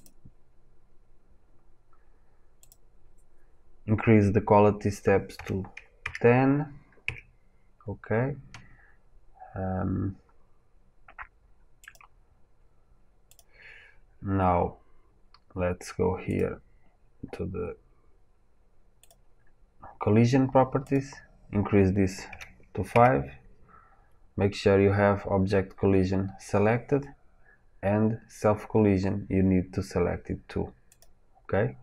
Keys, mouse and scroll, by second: 0.0-30.9 drag, 7.0 KP_Enter.